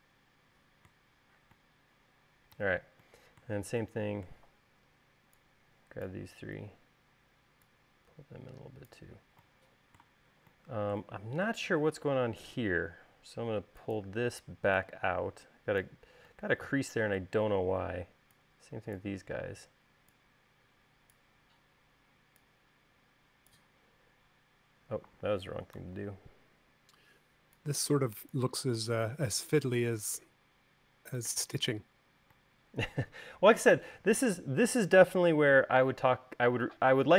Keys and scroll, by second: 26.2 super+z, 34.2 space.